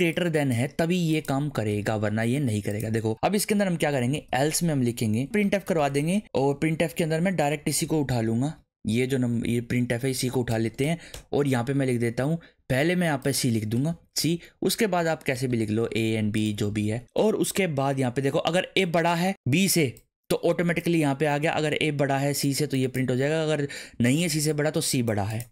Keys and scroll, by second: 1.7 ;, 3.6-6.3 typing, 8.3 Up, 9.1 alt+shift+Down, 10.1 Down, 10.5 BackSpace, 13.8 BackSpace, 13.9 c, 14.2 Right, 15.3 BackSpace, 15.5 a, 16.7 ctrl+s.